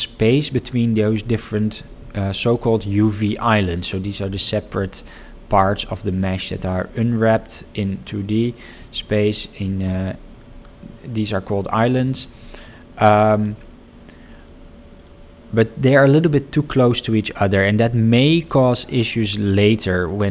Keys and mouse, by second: 2.3 shift+middle click, 6.9 shift+middle click, 9.1 shift+middle click, 9.8 shift+middle click, 12.1 shift+middle click, 12.7 shift+middle click.